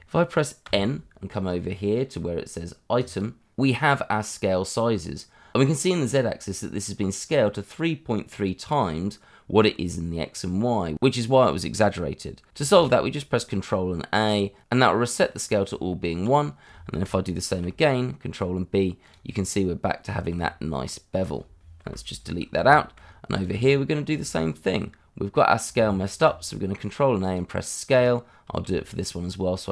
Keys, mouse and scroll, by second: 0.7 n, 3.0 click, 5.3 scroll down 1, 10.2-10.9 scroll up 1, 12.7 ctrl+a, 15.6 Tab, 16.7-17.0 scroll up 1, 17.5 ctrl+b, 19.0 click, 19.3-20.3 scroll down 1, 20.3 Tab, 21.8 Delete, 22.2-22.6 scroll down 1, 22.7 shift+middle click, 23.0 scroll up 1, 23.3 click, 23.6 shift+middle click, 26.0 ctrl+a, 27.2 click, 28.6 ctrl+a.